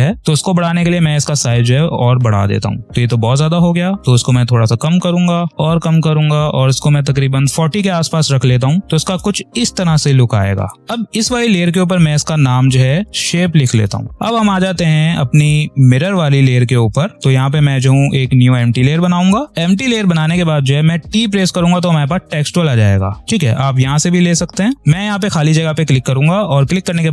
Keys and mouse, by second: 0.9 click, 8.8 space, 10.8 click, 12.7 s, 14.1 click, 15.3 click, 17.2 click, 21.3 t, 24.8 click.